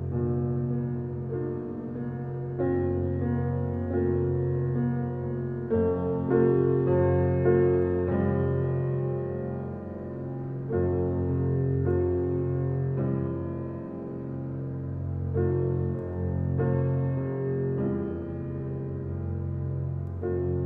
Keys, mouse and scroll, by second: 4.1 click, 6.3 click, 7.2 click, 9.3 click, 10.0 shift+scroll down 1, 10.1 shift+middle click, 10.6-12.2 scroll down 2, 12.2 Tab, 13.1 click, 13.9 Tab, 15.0-16.4 shift+middle drag, 16.4 click, 17.1 click, 17.7 click, 18.8 Tab, 19.3-19.9 scroll up 2, 19.9-20.6 shift+middle drag.